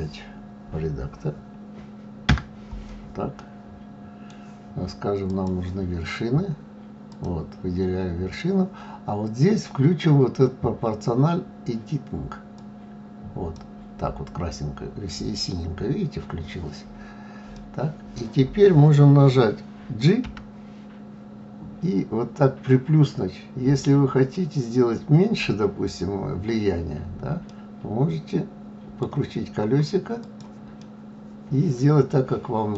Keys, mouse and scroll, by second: 2.3 Tab, 3.4-5.2 middle drag, 5.2 click, 7.1 click, 12.5 click, 17.5-20.2 middle drag, 20.2 g, 30.8-32.7 middle drag.